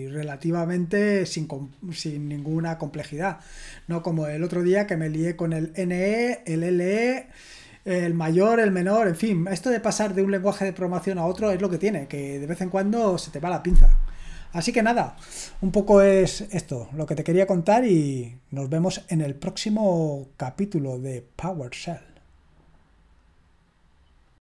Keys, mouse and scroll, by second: 24.3 click.